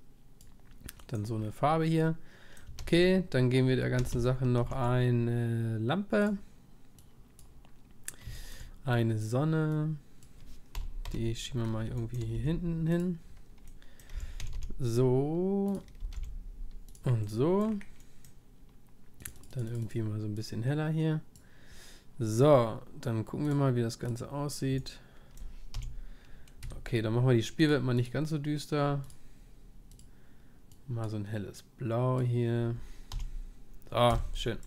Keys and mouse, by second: 1.0-4.0 middle drag, 2.8 shift+a, 4.0 a, 4.6 shift+a, 7.0-12.4 drag, 11.1 KP_7, 12.4 g, 12.9-15.7 middle drag, 14.1 r, 16.0 r, 19.5-25.8 drag, 19.5-25.8 middle drag, 26.6 p, 33.1 p, 34.1 p.